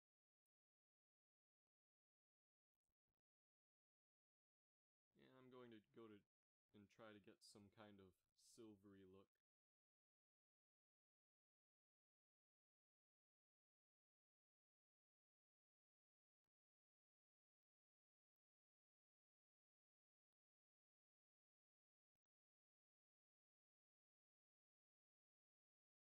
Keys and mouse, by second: 0.2 g, 3.8-5.9 drag, 6.7-8.1 drag, 8.0 shift+z, 13.7-15.5 drag, 18.7-20.2 drag.